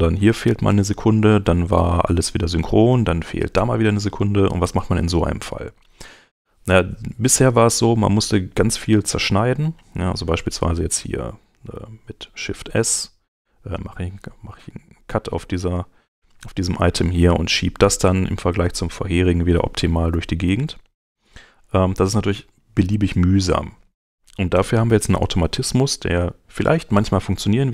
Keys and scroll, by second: 12.6 shift+s, 20.1 alt+super+z, 21.8 super+Escape.